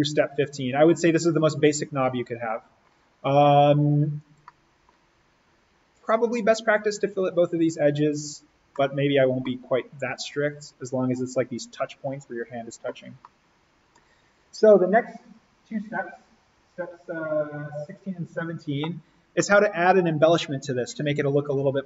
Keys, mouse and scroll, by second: 0.0 scroll, 3.0-4.3 scroll down 1, 4.3 middle click, 4.5 scroll down 1, 4.8 scroll up 1, 8.7 middle click, 9.0-9.5 scroll, 9.5-10.4 scroll up 1, 10.4 click, 13.1 middle click, 14.3 click, 19.3 click, 19.6-21.8 middle drag.